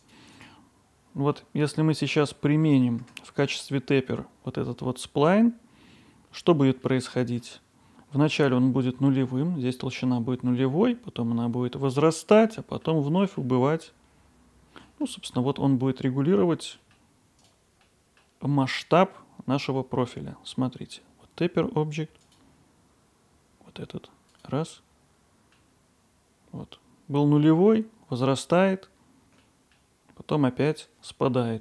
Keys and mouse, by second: 0.0-1.4 drag, 1.4 middle click, 2.6 middle click, 3.1 Tab, 6.9-7.4 middle drag, 12.4-12.8 middle drag, 13.2 middle click, 18.1 middle click, 20.1-20.5 middle drag, 22.2-24.8 drag, 24.8-25.5 middle drag, 29.4 middle click, 31.5-31.6 middle drag.